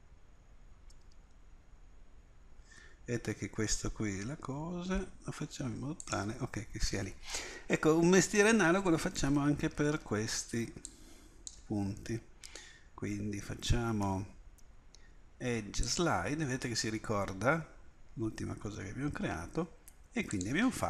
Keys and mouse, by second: 9.2 a, 10.0 b, 14.1 space.